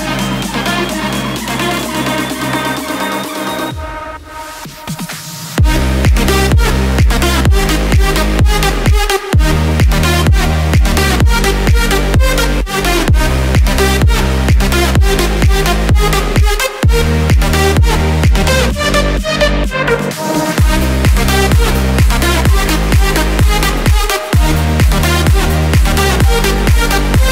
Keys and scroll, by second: 0.4 ctrl+z, 8.3 ctrl+d, 15.8 ctrl+d, 21.1 ctrl+z, 23.9 ctrl+d, 26.3 ctrl+g.